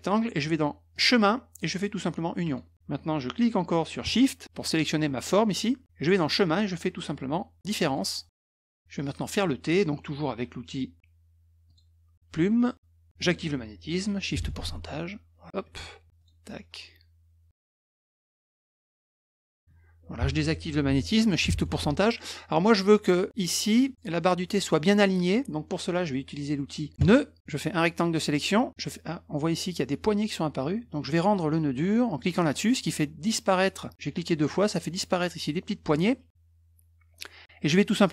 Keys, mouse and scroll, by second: 0.9 click, 2.4 click, 4.6 shift+click, 6.1 click, 7.8 click, 11.7 click, 14.4 ù, 16.2 click, 18.4 click, 21.6 shift+ù, 27.0 click, 27.7 click, 32.2 click, 33.6 click.